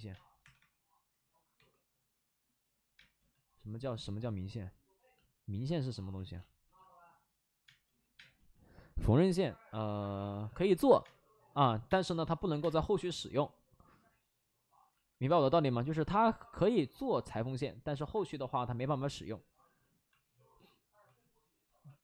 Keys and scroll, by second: 0.0 space, 0.3 3, 0.5 3, 1.5 2, 2.9 space, 6.1 ctrl+z, 7.6 space, 8.2 space, 11.0-13.2 typing, 14.8 ctrl+z, 15.2 space, 15.7 space, 15.8 space, 19.5 x, 20.9-22.0 typing.